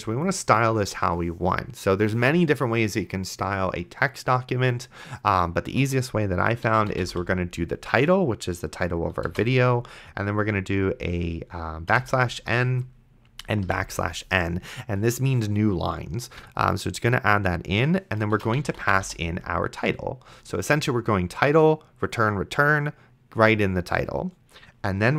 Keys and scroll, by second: 6.6-7.6 typing, 9.5 shift+;, 11.7-14.2 typing, 18.3-19.5 typing.